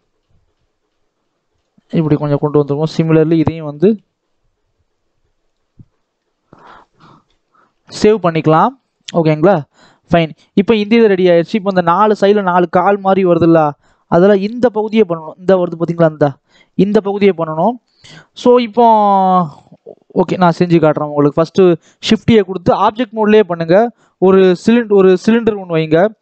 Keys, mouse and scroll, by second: 1.7 scroll down 4, 1.9 shift+middle click, 2.4-2.9 scroll up 1, 2.9 click, 3.6 g, 5.7 Tab, 5.8 scroll down 2, 6.1 middle click, 6.7 scroll down 1, 6.8 middle click, 7.4 ctrl+s, 8.2 scroll down 1, 8.3 middle click, 8.7 click, 9.0 scroll up 2, 9.2-11.4 middle drag, 11.4-12.5 scroll down 1, 12.5-13.0 scroll down 1, 13.0 KP_7, 18.1-18.4 scroll up 2, 18.4-18.9 scroll down 1, 18.9 shift+middle click, 19.4 shift+a, 23.9-26.2 shift+middle drag.